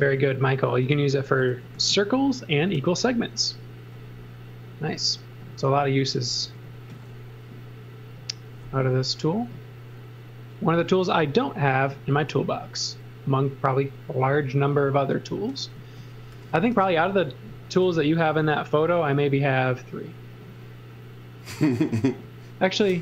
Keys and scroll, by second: 1.7 a, 6.4 l, 10.7 a, 15.8 z, 16.3 x, 16.7 v, 17.8 l.